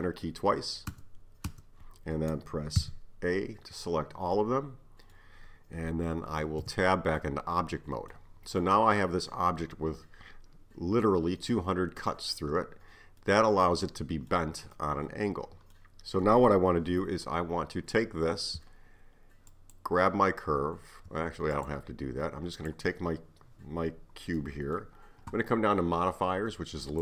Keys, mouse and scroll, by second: 2.8 a, 4.4-6.6 middle drag, 6.6 Tab, 7.2 scroll up 1, 7.2-11.7 middle drag, 13.2-17.8 middle drag, 19.5 shift+click, 21.6 click, 22.6 click, 24.4-26.9 middle drag, 26.9 click.